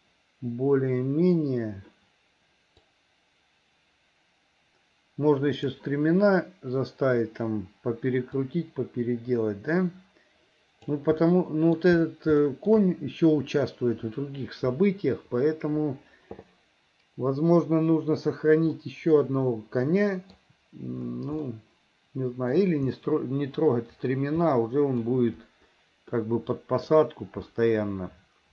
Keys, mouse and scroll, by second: 2.9-5.8 drag, 8.5-11.0 drag, 11.2 middle click, 12.5 shift+middle click, 18.8-20.3 middle drag, 21.4-22.5 middle drag, 24.5 middle click, 26.2 middle click, 27.5-28.5 middle drag.